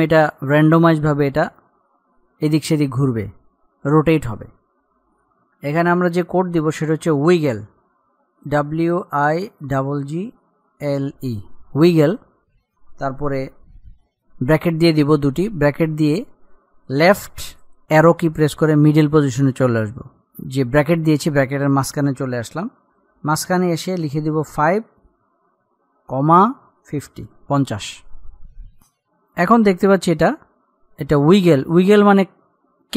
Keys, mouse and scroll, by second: 8.7 typing, 9.7-10.6 typing, 12.9-14.5 typing, 15.4 Left, 26.7 ,, 28.9-32.9 drag.